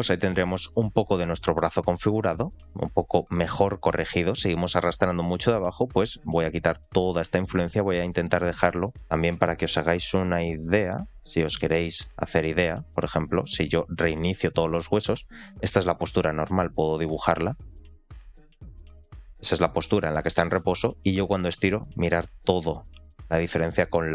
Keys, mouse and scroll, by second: 5.5 shift+middle click, 10.3-11.4 drag, 11.8 shift+middle click, 12.7 r, 14.0 alt+r, 14.2 alt+g, 14.4 alt+s, 14.9 scroll up 2, 15.2 shift+middle click, 16.0-18.8 drag, 19.2 scroll down 2, 19.6 shift+middle click, 20.3 r.